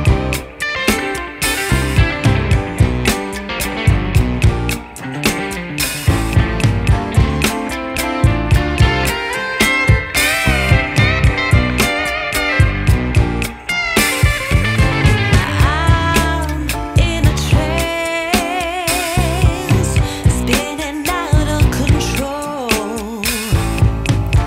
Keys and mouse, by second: 1.6 click, 3.8 click, 7.3 click, 11.3 click, 14.3 click, 16.9 click, 20.3 z, 22.1 click.